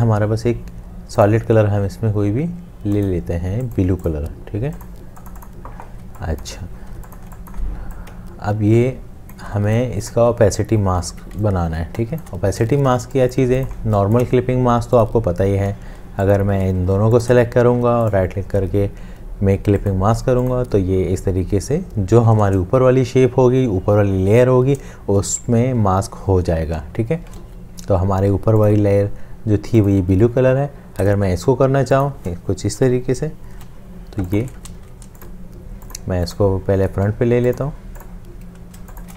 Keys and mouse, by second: 6.0 space, 7.0 space, 8.2 shift+click, 9.5 shift+space, 10.0 space, 10.1 space, 11.7 ctrl+alt+space, 13.5 space, 17.5 shift+click, 18.1 right click, 27.5 ctrl+z, 32.0 shift+click, 33.5 ctrl+7, 34.6 ctrl+7, 35.1 ctrl+z, 36.3 right click, 39.0 shift+click.